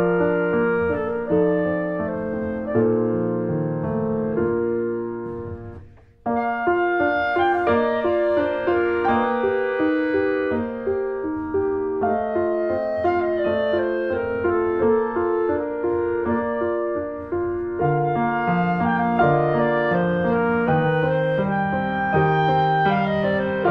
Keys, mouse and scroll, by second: 0.1 middle click, 0.4 click, 0.5 middle click, 0.7 click, 0.9 middle click, 2.4 r, 3.1 middle click, 3.5 shift+d, 4.5 click, 5.5 middle click, 5.9 r, 7.4 middle click, 7.7 r, 9.4 alt+middle click, 9.9 shift+middle click, 10.3 r, 11.8 alt+middle click, 12.4 alt+middle click, 12.7 scroll down 2, 12.9 r, 14.5 alt+middle click, 14.8 alt+middle click, 15.4 r, 19.2 middle click, 19.4 scroll up 2, 19.7 middle click, 20.5 click, 20.6 middle click, 21.0 scroll down 2, 21.2-22.7 middle drag, 22.7 click, 22.8 Tab, 23.0 click, 23.3 1, 23.5 click.